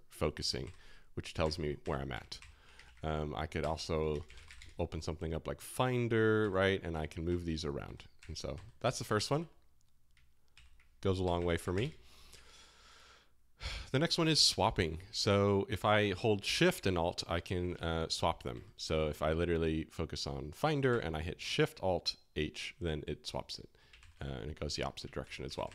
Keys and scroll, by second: 0.6 alt+l, 1.4 alt+h, 1.8 alt+l, 2.1 alt+h, 2.3 alt+l, 2.8 super+w, 3.6-4.9 typing, 6.4 alt+k, 6.9 alt+h, 7.2 alt+l, 7.4 alt+j, 7.8 alt+k, 8.2 alt+h, 8.5 alt+l, 8.8 alt+j, 9.0 alt+k, 10.5 super+w, 11.1-12.2 typing, 13.3-14.1 typing, 18.5 alt+i, 20.9 alt+shift+h, 23.9 alt+shift+l, 25.2 alt+shift+h, 25.4 alt+shift+l.